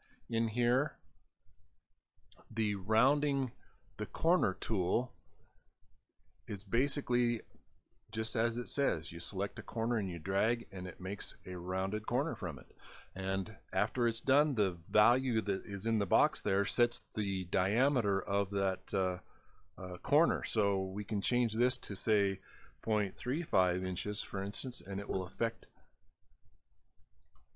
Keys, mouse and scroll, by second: 0.3 right click, 4.6 click, 6.1 click, 9.0 click, 10.5 click, 26.8-27.1 scroll down 1, 27.4 middle click.